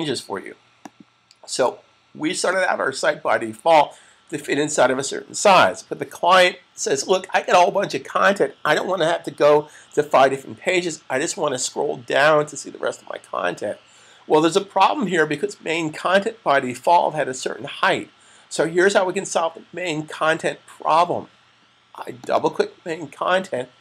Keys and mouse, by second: 0.8 click, 22.0 click, 22.3 double click.